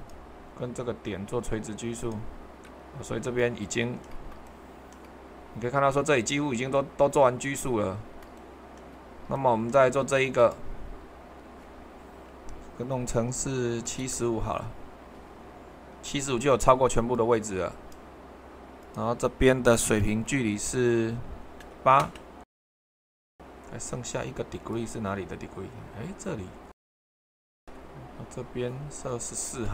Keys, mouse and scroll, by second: 7.6-12.3 middle drag, 13.8 7, 21.6 8, 22.0 Return, 29.3 typing.